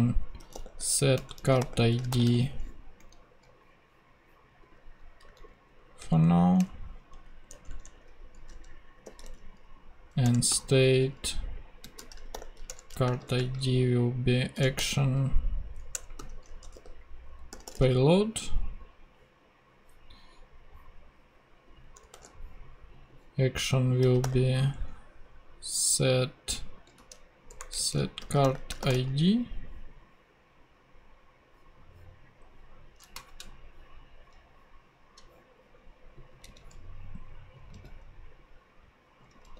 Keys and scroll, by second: 0.1-2.8 typing, 3.0 Right, 5.3 super+Left, 6.0 shift+super+Left, 6.1 shift+super+Down, 6.6 shift+Return, 7.1 Up, 7.5 Tab, 8.4 s, 9.2 a, 10.2 Return, 10.5 ., 11.8-18.2 typing, 12.7 Return, 22.1 ;, 23.6-24.5 typing, 27.0-29.9 typing, 36.5 super+c, 37.7 super+v.